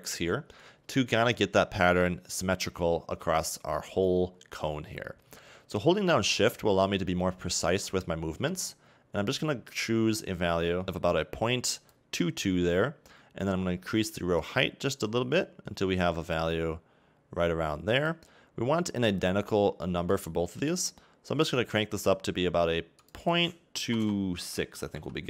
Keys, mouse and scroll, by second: 1.4-4.2 scroll up 2, 4.2 scroll down 3, 4.7-5.1 scroll up 2, 7.6 shift+click, 15.3 shift+click, 20.2 click, 20.8 click.